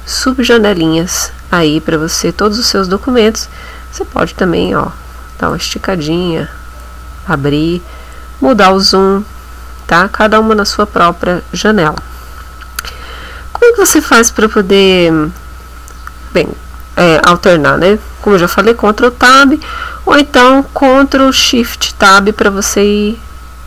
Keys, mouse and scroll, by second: 4.7 click, 6.8 click, 8.0-8.5 scroll up 1, 8.7-9.3 scroll down 1, 9.5-9.9 scroll up 1, 10.1 scroll down 1, 19.1 ctrl+Tab, 21.9 ctrl+shift+Tab.